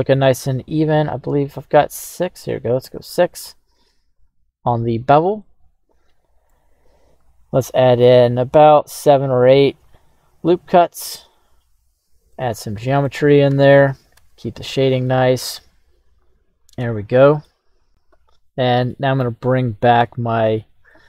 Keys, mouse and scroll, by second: 0.6 click, 3.0 click, 4.1 click, 5.4-6.5 middle drag, 7.2 ctrl+r, 11.1 click, 12.3 middle click, 13.5 Tab, 14.1 Tab, 15.0-17.5 middle drag, 17.4 scroll up 1, 18.3 ctrl+z, 18.9 middle click, 20.4-21.0 scroll down 2, 20.9-21.0 middle drag.